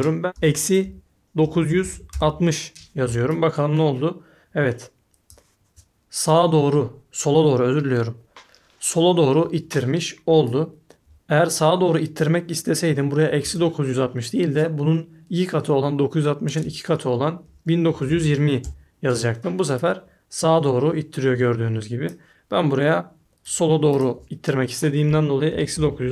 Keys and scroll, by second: 0.3-2.6 typing, 17.6-19.0 typing, 20.4 typing, 24.8-26.1 typing.